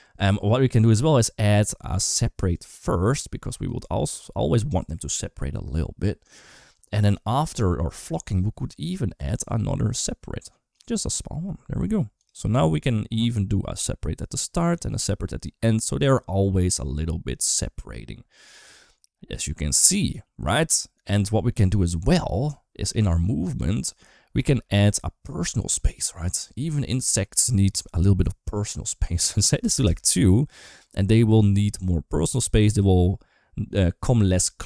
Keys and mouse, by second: 0.0 space, 3.3 click, 8.6-10.7 drag, 12.0 click, 12.2 space, 22.7 click, 23.7 space, 24.3 space, 25.6-29.7 drag.